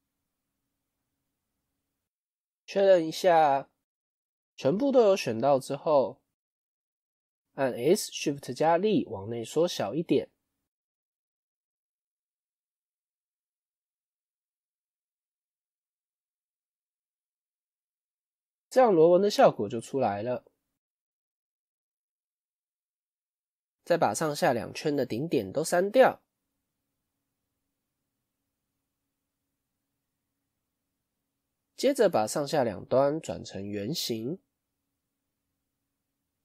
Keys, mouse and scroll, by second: 0.4 alt+shift+click, 0.9-5.8 middle drag, 5.8 KP_1, 6.5-7.8 scroll down 2, 14.8-18.1 middle drag, 18.1 Tab, 18.5-20.6 middle drag, 20.6 Tab, 22.7-24.5 shift+middle drag, 24.5 alt+click, 25.6 alt+shift+click, 27.5-28.6 middle drag, 28.6 KP_1, 30.3 click, 30.9 middle click, 31.9 alt+click, 32.4-33.6 middle drag, 33.6 alt+shift+click, 34.2 KP_1.